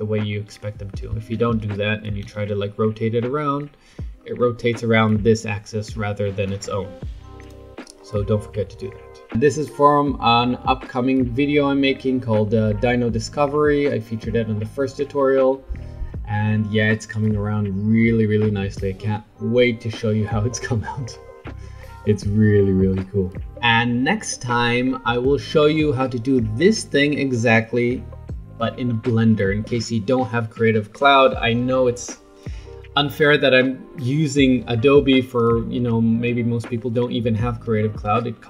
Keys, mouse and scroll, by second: 1.5 ctrl+z, 2.2 r, 4.2-6.4 scroll down 4, 6.4-7.8 right drag, 7.8-9.3 scroll up 5, 9.3 middle click, 9.3 scroll up 3, 12.2-13.8 middle drag, 13.8-14.5 scroll down 1, 14.5-15.5 scroll up 1, 15.5-21.0 middle drag, 21.4-23.5 middle drag, 25.1-28.2 middle drag.